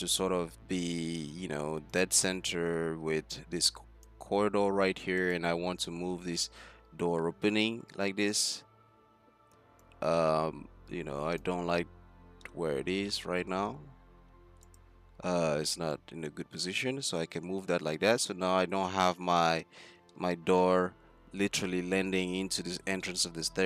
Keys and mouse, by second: 0.0 z, 5.6 Tab, 6.5 a, 7.2 z, 8.0 z, 8.9 c, 16.0 click, 17.0 z, 19.6 click.